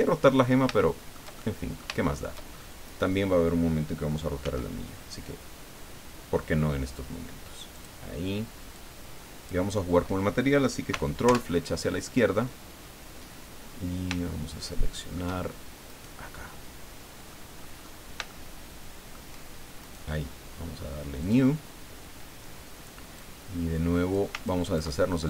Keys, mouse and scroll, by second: 0.6 shift+click, 1.7 shift+click, 2.0 shift+click, 2.5 shift+scroll up 2, 2.8 right click, 4.4 s, 7.7 click, 8.7 click, 11.2 ctrl+Left, 13.5 scroll down 2, 14.2-15.3 shift+drag, 15.8 right click, 16.5-17.5 middle drag, 17.6-18.1 scroll up 2, 18.2-19.3 shift+middle drag, 19.8 right click, 21.2 click, 23.1-24.3 drag, 24.4 ctrl+click.